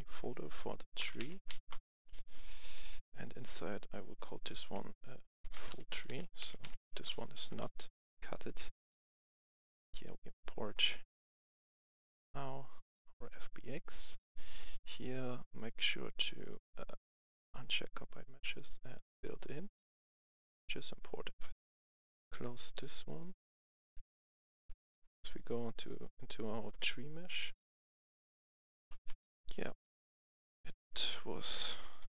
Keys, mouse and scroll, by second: 0.9-1.4 typing, 1.5 Return, 2.5 click, 3.0 right click, 4.0 click, 5.3-7.2 typing, 7.4 Return, 9.0-21.3 drag, 21.4 F11, 21.8 F10, 22.5 click, 24.5 F10, 25.1-28.8 drag, 29.0 right click, 29.7-30.6 typing, 31.9-32.1 typing.